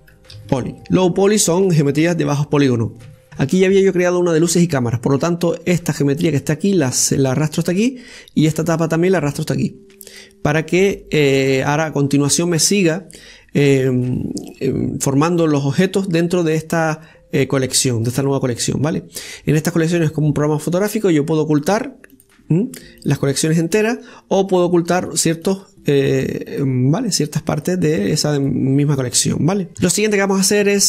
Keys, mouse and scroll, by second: 0.8 BackSpace, 6.9 click, 9.3 click, 13.7 click, 22.4 click, 23.0 click, 23.9 click, 24.6 click, 25.8 click, 26.3 click, 26.9 click, 27.4 click, 28.0 click, 28.4 click, 28.9 click, 29.3 click, 29.7 KP_7, 30.7 shift+middle click.